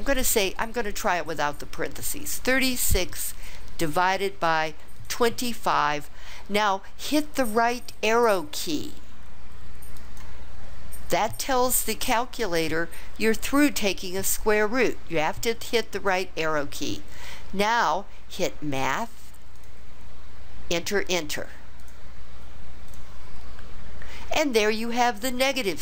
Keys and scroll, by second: 2.3 3, 3.0 6, 3.9 ÷, 4.9 2, 5.8 5, 9.9 ), 21.8 Return, 22.9 Return.